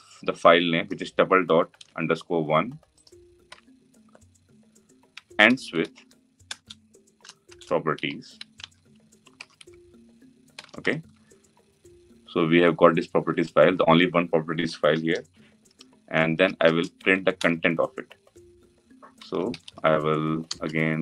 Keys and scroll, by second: 1.5 ctrl+c, 3.2 ctrl+v, 5.1 ctrl+v, 10.2 Return.